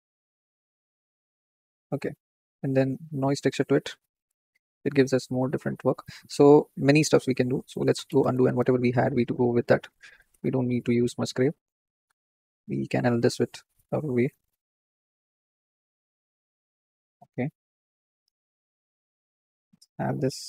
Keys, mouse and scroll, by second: 7.4-9.4 ctrl+z, 9.6 ctrl+z, 9.8 ctrl+z, 10.0-11.1 ctrl+z, 12.0 x.